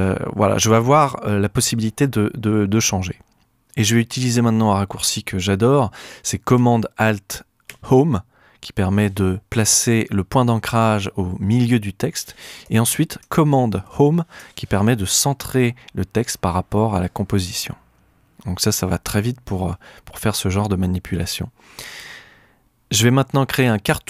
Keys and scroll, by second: 7.7 alt+super+Home, 13.8 super+Home.